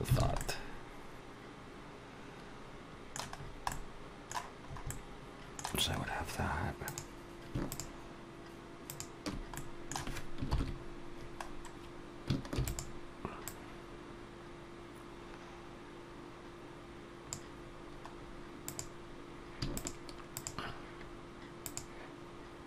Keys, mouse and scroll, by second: 0.0 alt+a, 0.2 middle click, 3.2-3.5 scroll down 3, 3.5 middle click, 4.5 scroll up 2, 4.7 middle click, 5.8-6.4 scroll up 2, 6.7 click, 7.5 shift+click, 8.7 click, 9.4 middle click, 10.3 ctrl+KP_7, 11.3-11.7 scroll down 2, 12.4 shift+d, 13.3 click, 18.0-18.5 scroll up 2, 18.5 click, 19.6 shift+click, 20.3 shift+click, 21.4 click.